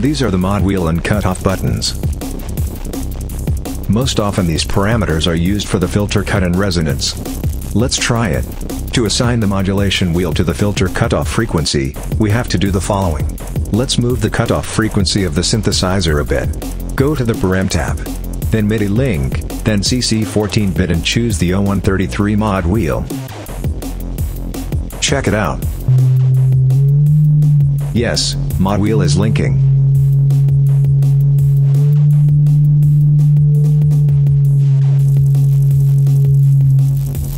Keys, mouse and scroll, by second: 7.1 click, 8.3 click, 10.0 click, 11.4 click, 12.8 click, 14.1-16.4 drag, 17.0 click, 23.0 click, 25.6-37.3 drag.